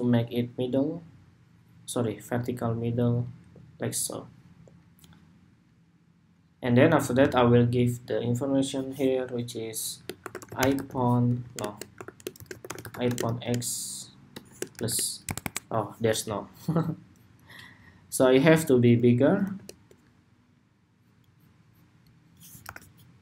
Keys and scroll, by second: 11.1 super+a, 16.1 BackSpace, 22.3 super+-.